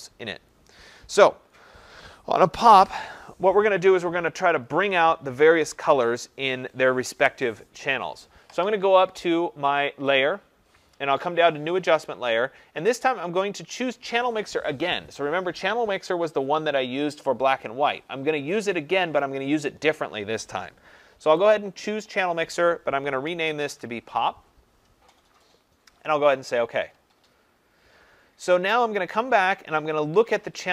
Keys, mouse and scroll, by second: 10.1 click, 21.5 click, 22.9-24.1 typing, 26.4 click.